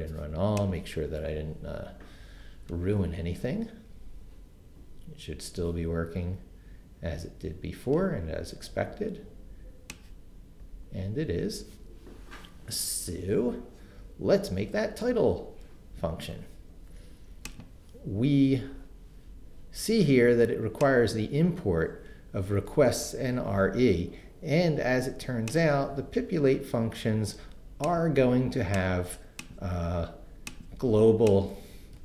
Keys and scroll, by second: 23.3 super+c, 31.9 super+v.